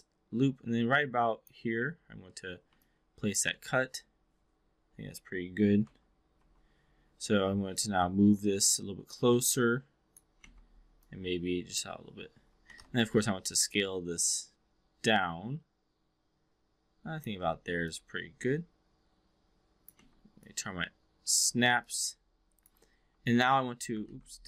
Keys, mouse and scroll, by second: 2.7-3.4 alt+drag, 3.5-3.8 alt+middle drag, 5.8 3, 6.3 4, 7.2 w, 7.8-10.1 drag, 10.4 x, 10.9-11.8 drag, 12.6 e, 12.7 r, 13.1-17.2 drag, 17.4 w, 17.7-19.9 drag, 20.0 x, 20.3-21.6 drag, 21.7-22.7 alt+drag, 23.0 3, 23.2 click, 24.0 ctrl+z.